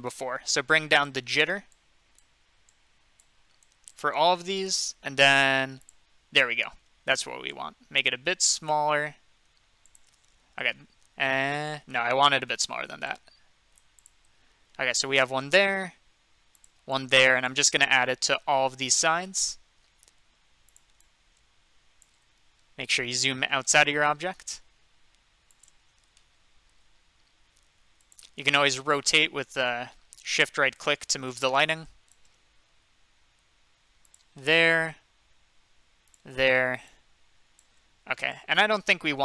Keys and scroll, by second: 6.7 ctrl+z, 12.8 ctrl+z.